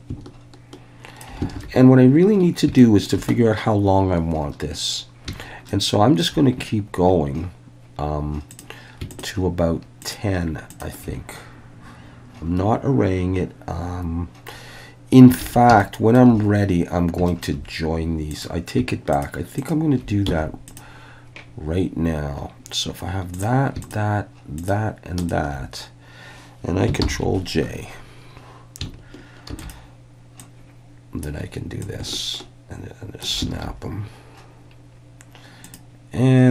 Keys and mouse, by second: 0.0-1.2 ctrl+drag, 1.6 alt+a, 2.8 shift+middle drag, 5.7-6.2 shift+middle drag, 9.1 shift+click, 10.1-10.8 shift+drag, 15.4 alt+a, 15.8-16.2 shift+middle drag, 17.3 shift+middle click, 18.3 click, 19.1 shift+click, 20.3 x, 23.3 click, 23.9 shift+drag, 24.7-25.3 shift+drag, 27.0 ctrl+j, 29.5 shift+d, 30.4 click, 31.8-33.2 ctrl+drag, 33.5 alt+a, 35.6 click.